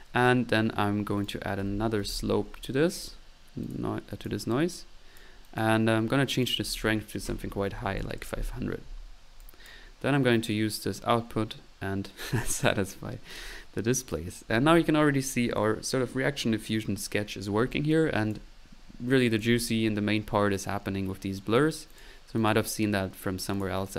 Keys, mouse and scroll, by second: 0.0-2.6 typing, 0.1-0.5 middle drag, 1.2 right click, 3.0 click, 4.0 drag, 5.6 click, 5.8 drag, 6.3-6.6 drag, 9.4-9.9 drag, 9.4-9.9 right drag, 10.5-12.3 drag, 10.5-12.3 right drag, 13.3 click, 13.7 drag, 17.9 click, 18.9 middle drag, 19.1 click, 19.3-19.9 drag, 20.5-22.0 right drag, 22.0 click, 22.4 click, 23.5-23.8 drag.